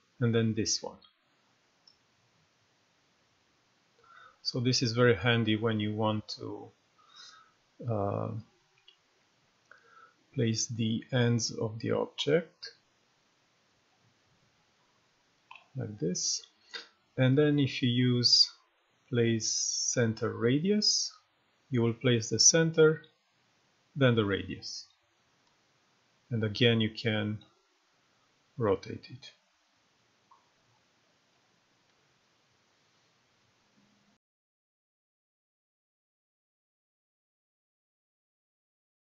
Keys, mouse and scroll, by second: 1.4-15.8 drag, 17.9-19.8 drag, 24.7-25.3 drag.